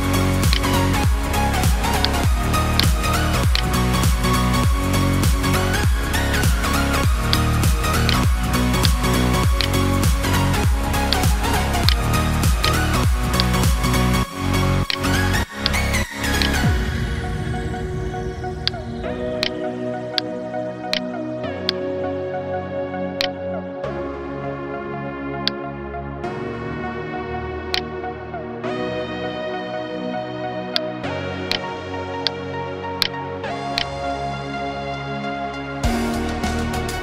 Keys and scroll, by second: 20.9 space, 22.7 space, 28.1 Delete.